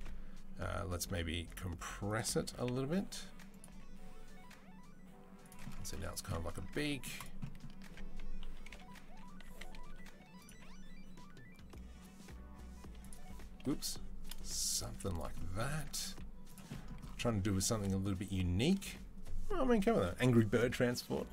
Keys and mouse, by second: 0.7 s, 2.3 s, 3.5 g, 5.7 z, 6.5 Tab, 7.0 click, 7.7 Tab, 8.2-10.3 typing, 12.7-21.3 middle drag, 13.5 g, 14.7 z, 15.6 Tab, 15.9 z, 17.2 Tab.